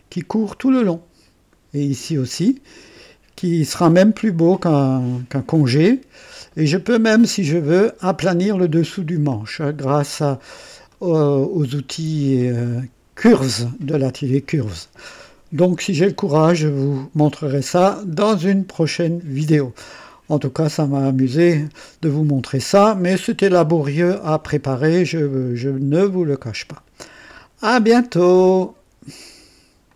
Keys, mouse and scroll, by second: 5.3-7.3 drag, 7.3 scroll down 2, 9.2-10.8 drag, 10.9 right click, 15.2 scroll down 2, 15.9-17.3 drag, 17.9-18.6 right drag, 18.9 click, 24.6-25.9 drag, 28.1 right click, 29.8 click.